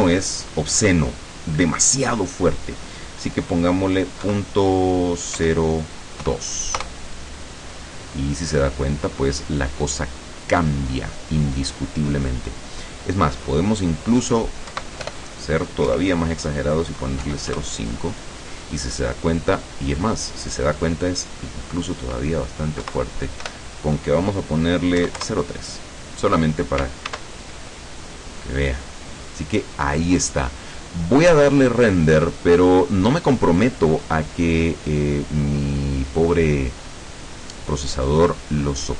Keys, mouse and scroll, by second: 4.3 KP_Decimal, 5.5 KP_0, 6.3 KP_2, 6.9 KP_Enter, 9.0-9.5 scroll up 3, 9.5-9.9 scroll down 2, 13.5 click, 14.8 Right, 15.1 BackSpace, 15.9 KP_0, 17.3 KP_5, 17.6 KP_Enter, 21.6 click, 22.9 Right, 25.1 KP_3, 25.3 KP_Enter, 27.1 ctrl+s, 27.4 ctrl+click, 28.5-29.3 scroll down 4, 29.6-30.3 scroll up 1, 30.5 scroll down 1, 31.6 scroll down 1.